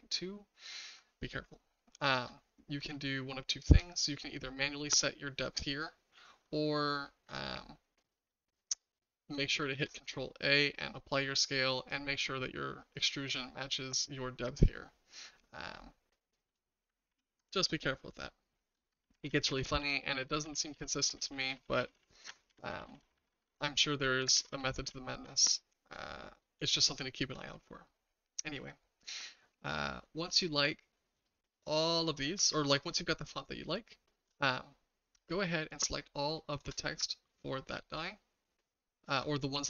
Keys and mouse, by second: 3.2-3.7 shift+middle drag, 9.7 ctrl+a, 17.1 ctrl+z, 18.2-18.7 shift+middle drag, 19.0 ctrl+z, 19.2 ctrl+z, 19.5 ctrl+z, 19.6 ctrl+z, 19.8 ctrl+z, 20.1 ctrl+z, 20.3 ctrl+z, 20.4 ctrl+z, 20.7 ctrl+z, 21.0 ctrl+z, 21.2 ctrl+z, 21.3 ctrl+z, 21.5 ctrl+z, 21.6 ctrl+z, 21.8 ctrl+z, 21.9 ctrl+z, 22.2 ctrl+z, 22.5 ctrl+z, 22.7 ctrl+z, 22.9 ctrl+z, 23.0 ctrl+z, 23.1 ctrl+z, 23.3 ctrl+z, 23.4 ctrl+z, 23.9 ctrl+z, 24.3 ctrl+z, 24.7 ctrl+z, 24.8 ctrl+z, 25.6 shift+middle drag, 26.7-27.2 shift+middle drag, 27.5-27.9 middle drag, 31.3-32.6 shift+middle drag, 33.0-34.3 shift+middle drag, 36.5 shift+click, 37.4-37.9 shift+middle drag.